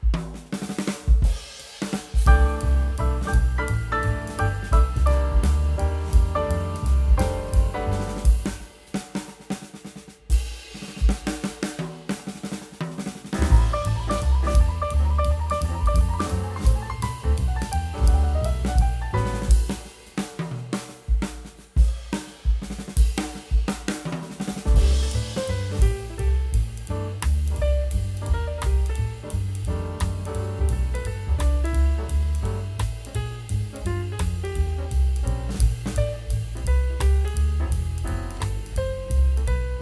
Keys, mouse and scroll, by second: 31.8 double click.